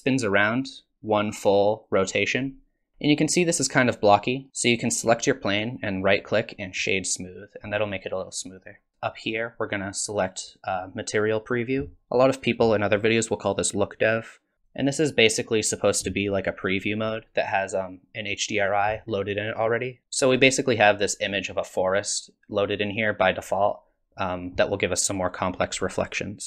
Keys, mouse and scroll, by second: 2.9-4.0 scroll up 4, 2.9 space, 4.0-4.5 scroll down 1, 4.5 click, 5.8 right click, 7.7 middle click, 14.8 click, 17.3 scroll down 4, 18.6 click.